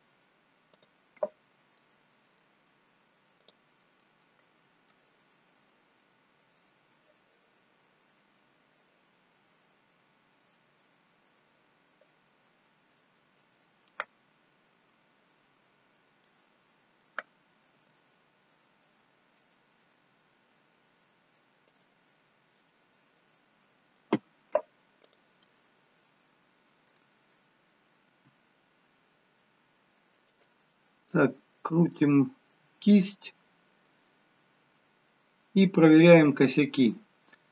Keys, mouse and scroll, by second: 0.7 click, 1.7 middle click, 3.4 click, 4.0 middle click, 16.2 middle click, 18.0 r, 22.3-22.7 scroll up 1, 22.7 middle click, 25.1 click, 25.5 middle click, 28.2 r, 30.7 middle click, 32.4-32.8 scroll up 1, 33.3 middle click, 34.1-35.1 scroll down 2, 35.9 click, 36.6 middle click, 37.1-37.5 scroll up 3.